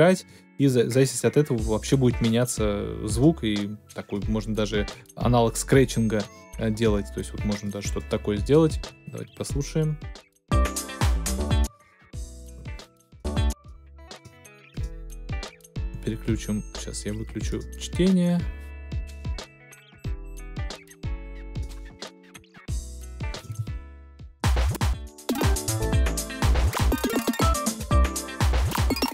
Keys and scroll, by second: 11.5 space, 23.4 space.